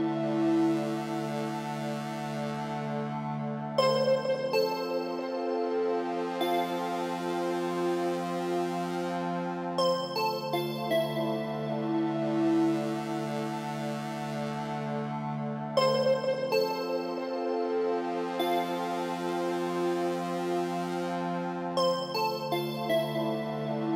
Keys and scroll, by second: 4.7 Down, 5.8 Left, 15.1 Down, 23.3 Return.